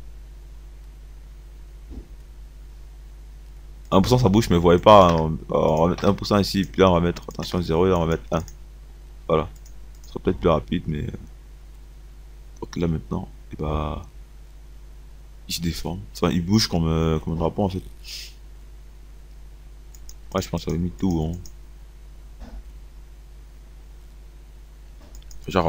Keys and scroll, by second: 5.1 KP_1, 5.2 KP_0, 6.1 KP_1, 7.5 KP_0, 8.4 KP_1.